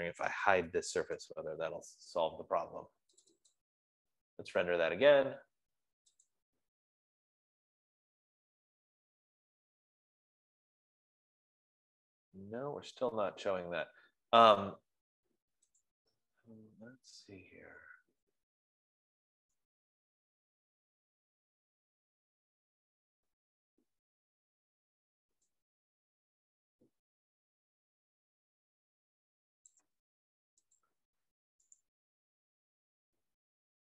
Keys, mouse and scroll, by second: 1.1-2.0 typing, 3.7 click, 4.2 click, 6.8 click, 16.1-21.1 drag, 25.1 F15, 26.0 click, 30.1 click, 31.4 click, 32.5 click.